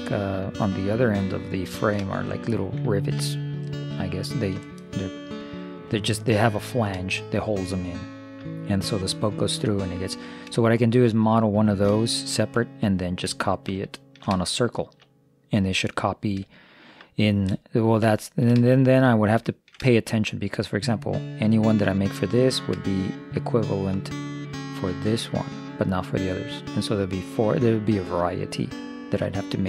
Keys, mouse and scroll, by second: 3.0-4.7 middle drag, 7.2 middle click, 10.7 middle click, 13.0-14.4 middle drag, 16.5-17.7 middle drag, 21.2 middle click, 23.0-24.7 middle drag.